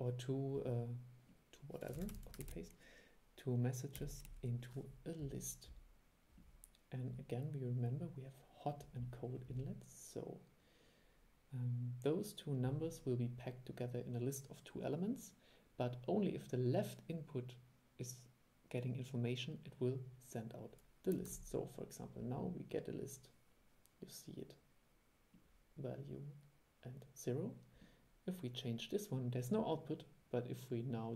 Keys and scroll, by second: 2.1 super+c, 2.3 super+v, 21.4 super+e.